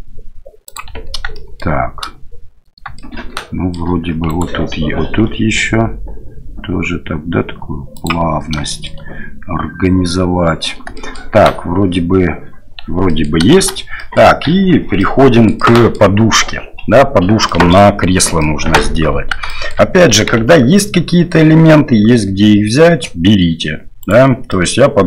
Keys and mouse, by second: 1.3 shift+middle click, 2.9 shift+click, 4.3 alt+right click, 5.3 g, 8.7 shift+click, 11.0 shift+middle click, 13.1 middle click, 13.6 shift+z, 14.1 middle click, 14.5 Tab, 15.0 middle click, 15.5 middle click, 17.5 click, 18.4 click, 19.5 shift+click, 20.4 Tab, 20.7 click, 21.7-23.0 drag, 24.0 right click, 24.5 click.